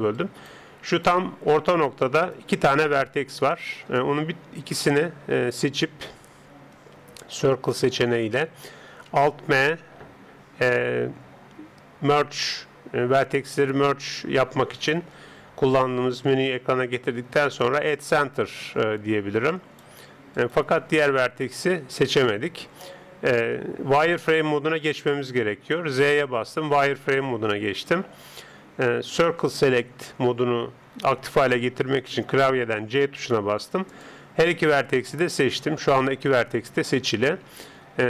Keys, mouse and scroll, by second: 0.2-3.2 right drag, 3.4-6.8 middle drag, 6.8 c, 9.8 alt+m, 19.6-23.1 right drag, 25.9 z, 29.2 c, 35.8-38.0 middle drag.